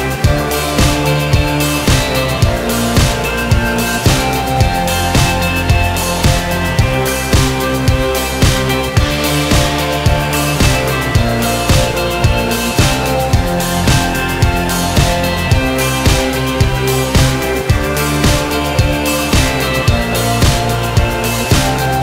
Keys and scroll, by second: 1.6 ctrl+r, 2.4 ctrl+a, 16.7 alt+z.